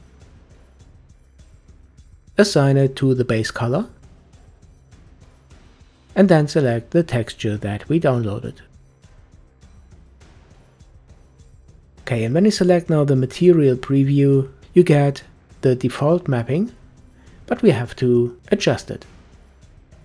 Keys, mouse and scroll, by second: 2.8-5.9 drag, 6.4-9.5 drag, 12.7 click, 13.6-14.8 middle drag, 14.8-15.6 scroll up 4, 15.6-16.2 shift+middle drag, 16.2-17.4 scroll down 2.